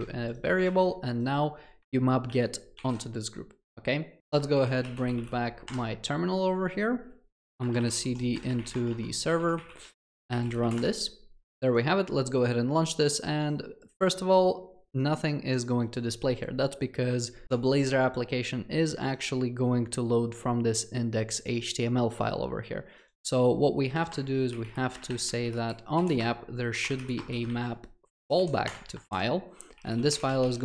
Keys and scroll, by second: 0.0 Escape, 0.7 ctrl+c, 2.3 ctrl+v, 4.3 ctrl+shift+a, 5.7 ctrl+shift+a, 5.8 alt+F12, 28.7 Return.